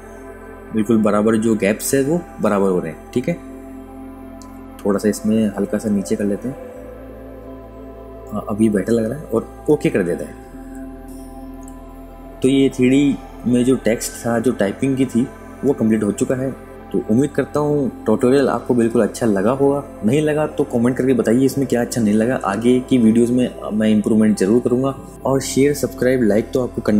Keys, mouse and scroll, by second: 12.3 super+KP_Subtract, 13.0 click, 13.5 space, 13.8 click, 17.3 z, 18.6 f, 20.9 click.